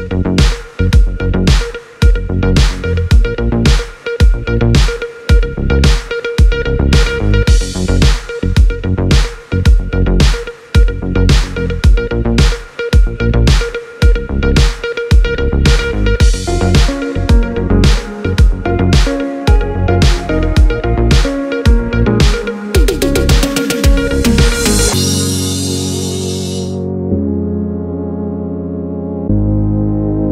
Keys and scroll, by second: 14.4 p, 16.8 u.